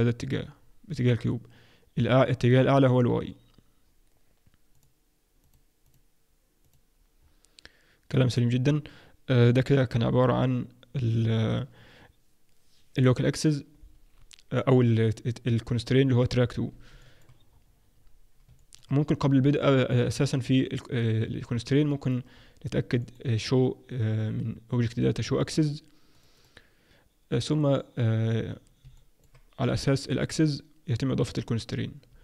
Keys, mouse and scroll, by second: 0.5-0.9 scroll down 2, 4.7 click, 5.4 click, 6.6 click, 7.1-7.9 scroll down 2, 7.9-8.8 scroll down 1, 17.0 middle click, 17.5-18.5 scroll up 2, 18.5 scroll up 1, 18.5 middle click, 19.8 click, 21.9 middle click, 22.3-22.9 scroll up 3, 22.9 scroll up 1, 23.0 middle click, 24.8 click, 26.1 click, 26.3 click, 27.5-28.3 scroll up 1, 28.3-28.8 scroll down 2, 28.9 alt+middle click, 31.0-31.3 scroll down 1.